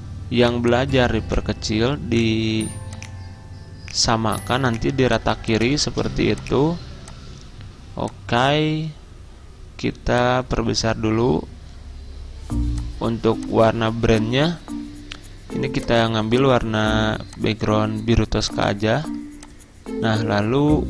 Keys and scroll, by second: 6.1 c.